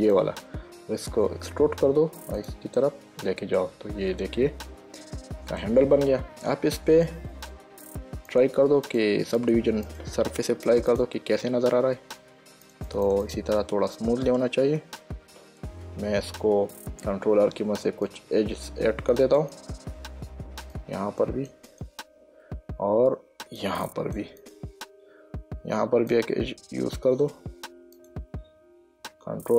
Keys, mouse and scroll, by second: 0.3 shift+click, 1.7 e, 2.7 click, 3.1 middle click, 6.3 Tab, 8.6 click, 13.0 click, 15.7 Tab, 17.5 ctrl+r, 18.4 click, 19.7 click, 20.6 ctrl+r, 21.1 click, 23.1 ctrl+r, 23.9 click, 25.9 ctrl+r, 26.4 click, 28.3 click.